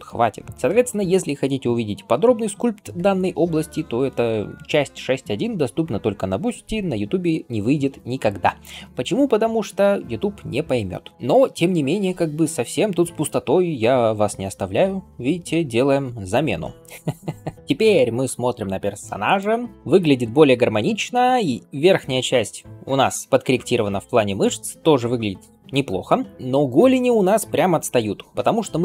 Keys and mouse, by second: 0.5 ctrl+r, 11.9-19.5 right drag, 17.5 ], 19.5 shift+middle click, 19.6 shift+click, 19.7-28.8 shift+middle drag.